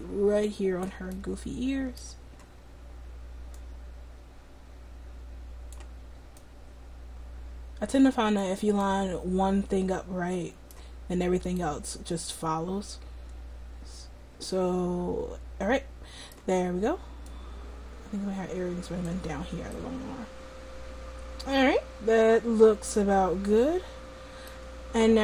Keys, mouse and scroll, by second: 1.2-2.8 middle drag, 3.6-5.8 drag, 6.5-8.5 drag, 9.0 middle click, 17.3-19.1 drag.